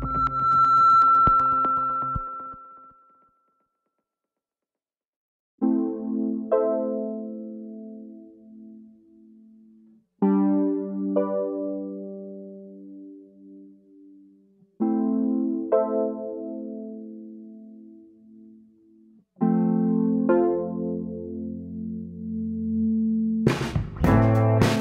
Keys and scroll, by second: 13.3 space, 13.9 space, 23.2 space.